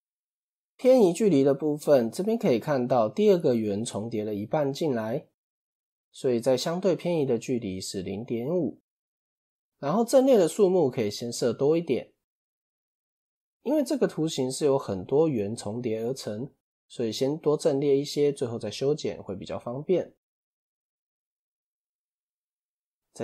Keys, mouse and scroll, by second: 6.2-9.7 drag, 13.7-16.8 scroll down 2, 18.2 click, 21.1 click.